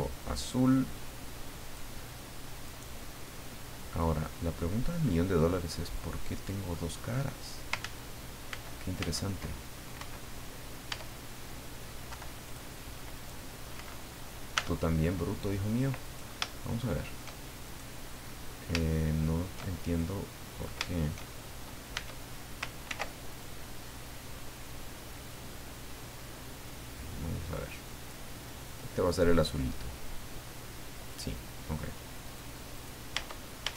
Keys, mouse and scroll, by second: 2.6 right click, 3.3 middle click, 4.3-4.9 scroll down 2, 5.0-6.9 middle drag, 7.2 scroll up 1, 7.8 ctrl+z, 8.5 ctrl+z, 9.9 Escape, 10.9 Tab, 12.1 Delete, 12.4 click, 13.1 right click, 14.5 Tab, 16.0 right click, 16.7 shift+middle click, 17.6 shift+right click, 18.2 middle click, 18.9 shift+middle click, 19.9 shift+click, 20.9-21.9 shift+middle drag, 21.9 Tab, 22.9 ctrl+r, 25.2 click, 26.6 click, 27.6 click, 28.6 click, 29.6-31.3 drag, 32.2 right click, 32.7 right click, 33.1 Tab.